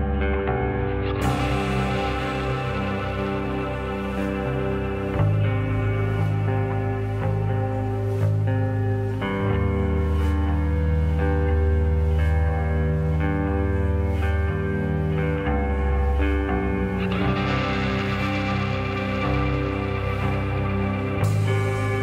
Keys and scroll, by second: 5.2 0, 8.4 ctrl+d, 9.9 s, 11.8 9, 12.2 Return, 15.7 -, 16.3 Return.